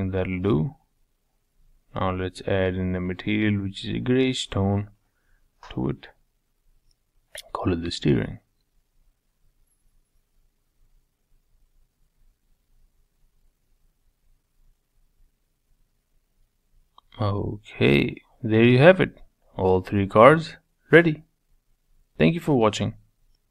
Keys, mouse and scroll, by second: 0.3 scroll up 2, 0.9-2.7 drag, 10.2 click, 10.7 middle click, 11.3 click, 11.7-12.3 scroll up 4, 12.3-14.5 middle drag, 14.5-14.9 scroll down 2, 14.9-16.7 middle drag.